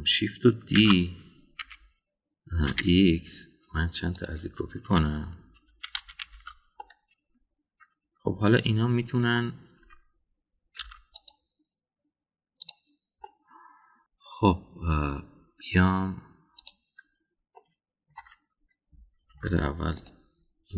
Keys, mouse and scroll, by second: 1.7 shift+d, 6.7 shift+r, 6.9 shift+r, 7.2 shift+r, 7.8-10.4 middle drag, 10.8 Tab, 11.8 Tab, 12.1 click, 13.7 click, 17.5 click, 18.5-19.1 middle drag, 20.3 Tab.